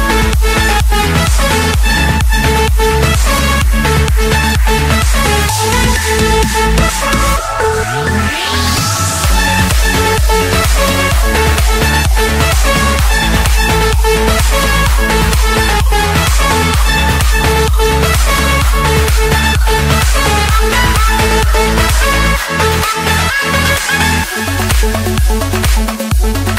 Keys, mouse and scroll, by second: 0.6 Escape, 1.3-1.7 scroll up 2, 3.1 click, 4.2 Delete, 5.1 scroll down 1, 5.4-5.9 scroll, 5.9 Escape, 7.2 click, 13.5 click, 13.9-14.7 scroll down 8, 15.5 scroll, 16.4 click, 16.8-17.3 scroll, 17.6 Escape, 24.4-26.0 typing.